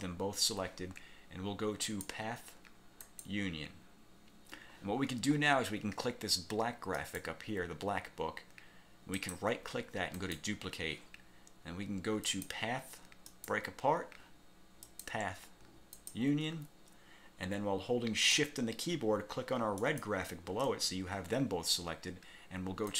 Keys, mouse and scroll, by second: 2.0 click, 3.2 click, 7.1 click, 9.3 click, 10.3 click, 12.4 click, 13.4 click, 15.0 click, 16.1 click, 19.9 shift+click.